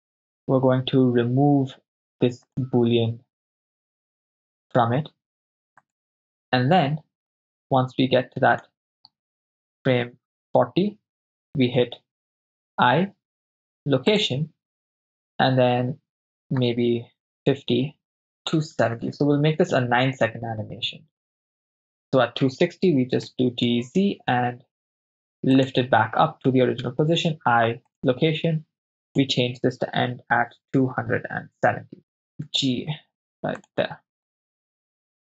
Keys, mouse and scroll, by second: 2.5 click, 5.9 click, 7.4-8.7 drag, 9.8 Left, 10.0 Left, 10.3 Left, 12.7 i, 16.1-17.2 drag, 17.2 Right, 18.8 Right, 19.0 Right, 19.1 Right, 19.2 Right, 19.6 Right, 20.1 Right, 20.4 Right, 20.7 Right, 21.2 Right, 21.7 Right, 23.3 g, 23.7 z, 25.8 ctrl+drag, 26.8 i, 29.1-31.7 drag, 32.0 middle click, 32.0 right click, 32.5 g, 33.6 drag, 34.4-35.1 drag, 35.2 shift+space.